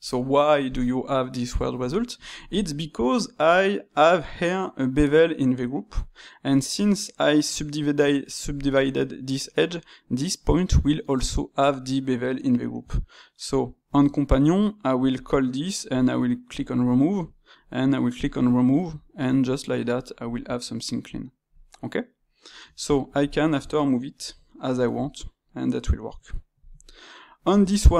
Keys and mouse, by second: 6.0-9.0 shift+middle drag, 19.5-22.6 shift+middle drag, 22.6 Tab, 23.1 alt+click, 24.1 g.